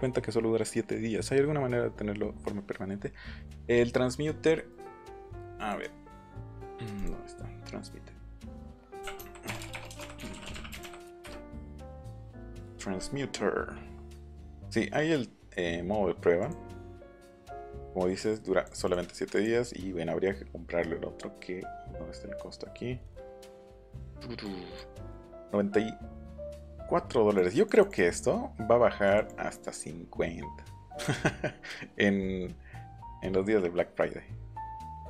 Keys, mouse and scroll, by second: 3.3 middle click, 3.9 middle click, 4.2 scroll up 1, 4.5 middle click, 5.5 click, 6.9 click, 8.7-10.1 typing, 12.7 click, 16.4 click, 18.3 click, 18.8 click, 19.3 click, 24.4 click, 25.1 click, 26.6 click, 27.5 click, 27.7 click, 29.0 click, 29.3 click.